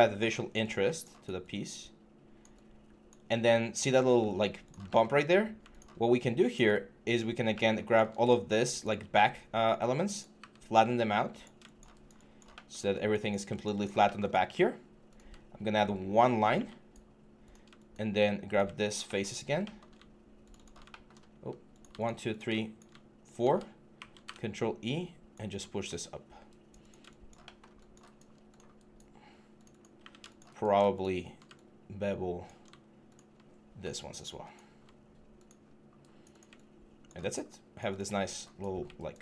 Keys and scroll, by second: 23.7 ctrl+e.